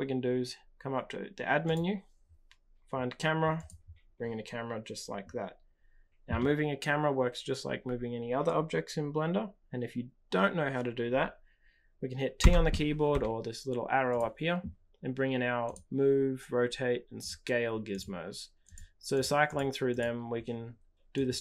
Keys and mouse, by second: 1.6-3.7 drag, 12.4 t, 13.0 t, 14.0-15.7 drag, 17.1 click, 17.9 click, 18.7-19.2 drag, 19.5 click, 19.8 click, 21.1-21.4 drag.